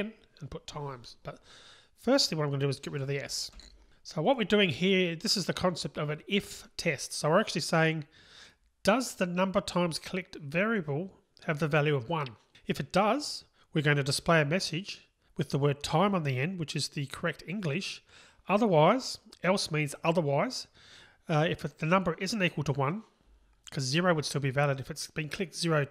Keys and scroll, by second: 0.1 super+v, 3.6 Delete.